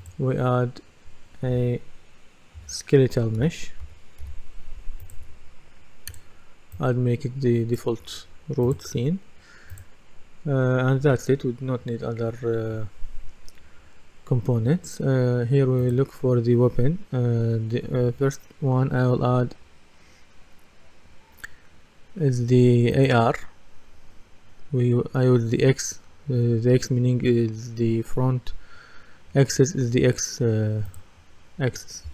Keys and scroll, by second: 2.6-3.8 typing.